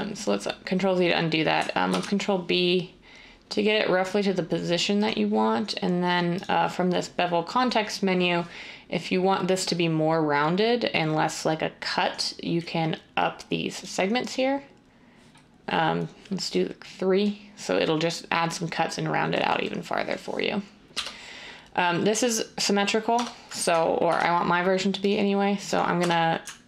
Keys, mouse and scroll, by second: 1.9 ctrl+b, 20.9 1, 23.1 Tab, 24.0 ctrl+r, 26.0 Tab.